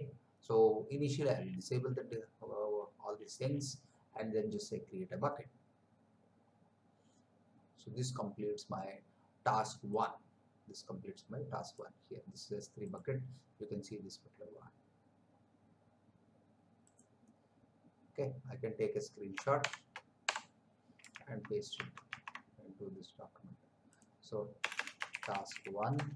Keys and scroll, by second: 19.6 shift+Print, 20.2 Print, 21.4 alt+Tab, 24.6 Return, 25.1-26.1 typing.